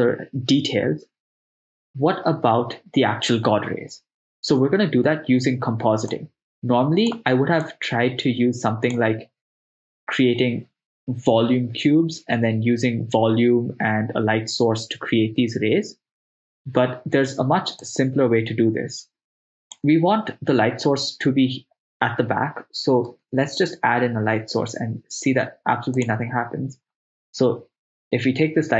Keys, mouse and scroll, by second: 6.4 click, 7.7-9.0 drag, 18.1-20.0 drag, 23.2 shift+a.